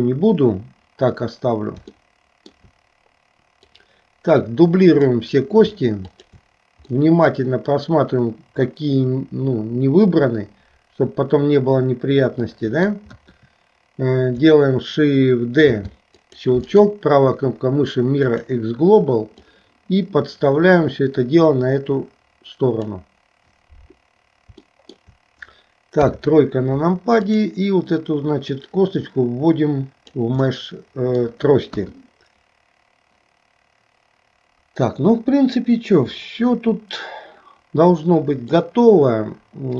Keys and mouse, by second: 2.1 shift+middle click, 3.7-5.2 drag, 6.1 shift+click, 7.0-13.0 middle drag, 13.2 KP_1, 15.8 shift+d, 16.7-18.5 right drag, 19.4-22.9 drag, 24.8 shift+middle click, 26.0 KP_3, 28.6-30.2 drag, 30.5 middle click, 31.7 KP_1, 38.6-39.7 middle drag.